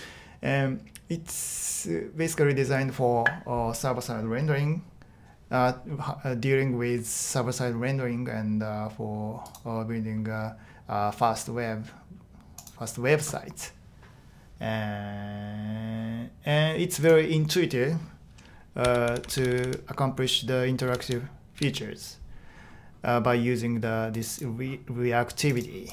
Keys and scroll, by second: 18.6-21.5 typing.